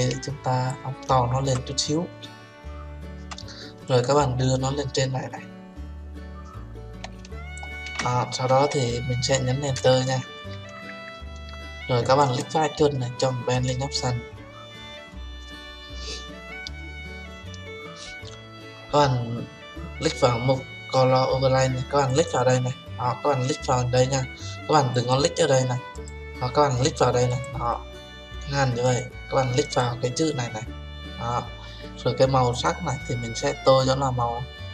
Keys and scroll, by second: 9.7 Return.